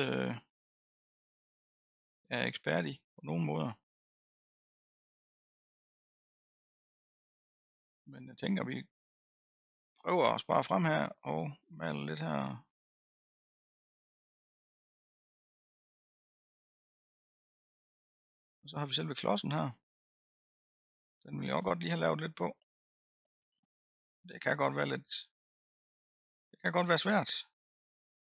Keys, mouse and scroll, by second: 0.7-5.5 drag, 5.5 middle click, 6.1-6.7 scroll down 1, 6.7-8.2 middle drag, 8.2-11.2 drag, 11.5-14.5 drag, 14.5-15.5 middle drag, 15.5-18.6 drag, 18.6-18.9 scroll down 1, 18.9-20.4 scroll up 6, 20.4 middle click, 21.1-21.6 scroll down 1, 21.6-22.7 middle drag, 22.7-24.3 scroll up 1, 24.3-27.3 drag.